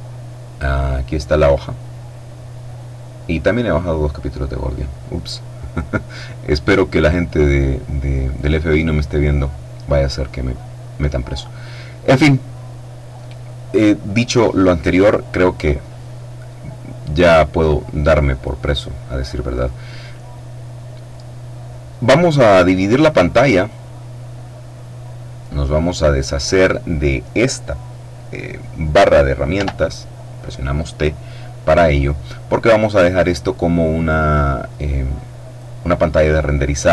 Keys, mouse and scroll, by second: 0.9 click, 10.9 click, 23.4-26.3 drag, 29.1 t.